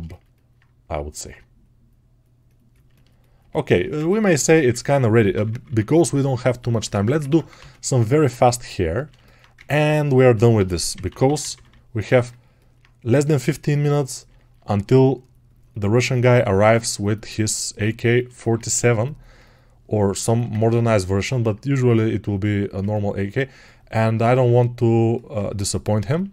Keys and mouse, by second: 3.3-19.2 ctrl+alt+right drag, 7.3 ctrl+Tab, 7.5 shift+a, 9.6 ctrl+Tab, 19.2-26.3 drag.